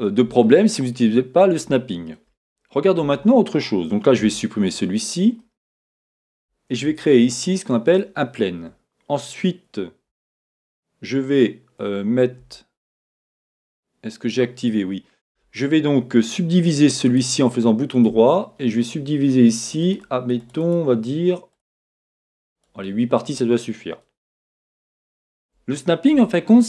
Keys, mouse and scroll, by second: 0.3 shift+middle click, 2.2-3.0 scroll up 1, 3.0 Tab, 4.2 x, 5.4 middle click, 6.7 shift+a, 10.1 shift+a, 12.7 Tab, 17.1-19.6 right drag, 19.6-23.4 drag, 24.9-26.1 middle drag.